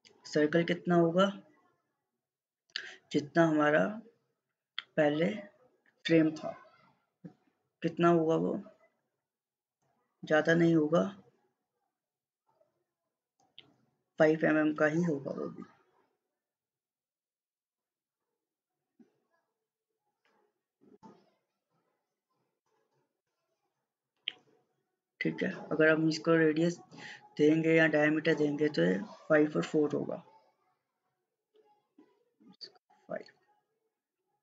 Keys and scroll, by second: 32.6 5, 32.9 Return.